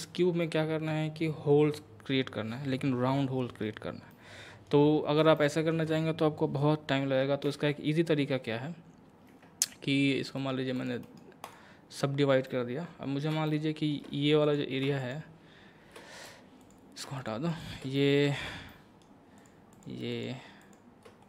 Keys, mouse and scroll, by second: 0.4-3.4 middle drag, 4.1 middle click, 7.5 Tab, 10.4 right click, 10.8 click, 11.0 right click, 11.4 click, 12.5 middle click, 14.5 click, 16.6 click, 17.2 shift+click, 18.0 middle click, 18.7 scroll up 1, 19.4 shift+click.